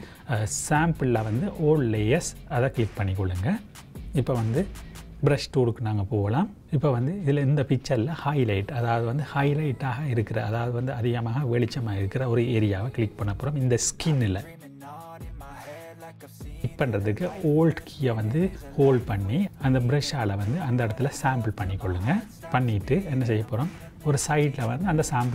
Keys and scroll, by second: 6.7 [.